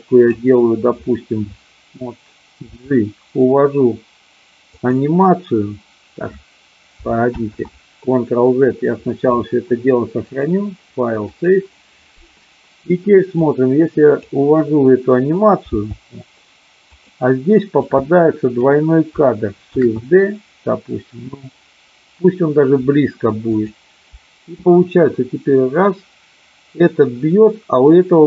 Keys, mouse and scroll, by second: 2.6 g, 4.7 click, 7.4 ctrl+z, 10.1-11.5 drag, 13.4-14.4 drag, 15.6 g, 16.9 click, 17.9-18.6 drag, 19.6 shift+d, 23.5 click, 24.6-28.2 drag.